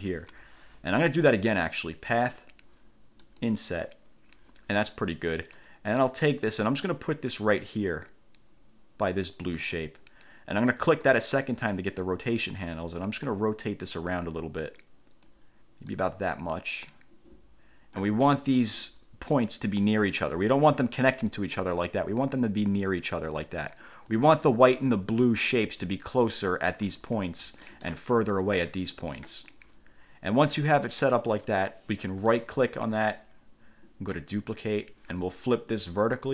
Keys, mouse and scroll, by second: 0.5 1, 2.4 click, 3.4 click, 5.7-9.9 drag, 11.2 click, 13.1-15.7 drag, 16.1-18.3 drag, 19.5-24.5 drag, 27.3 ctrl+scroll down 2, 27.8 ctrl+middle click, 29.1 middle click, 32.5 click, 34.3 click, 36.1 click.